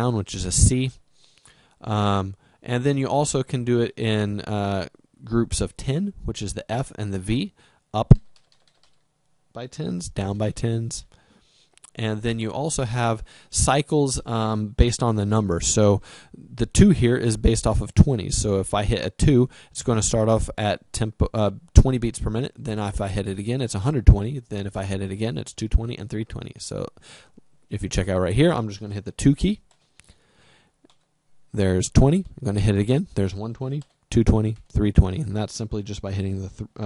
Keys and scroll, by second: 0.3 c, 8.0 f, 10.5 v, 29.6 2.